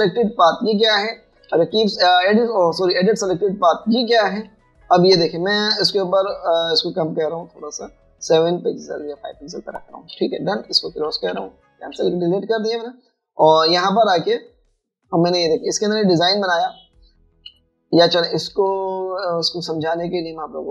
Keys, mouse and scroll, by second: 11.2 v, 18.5 v.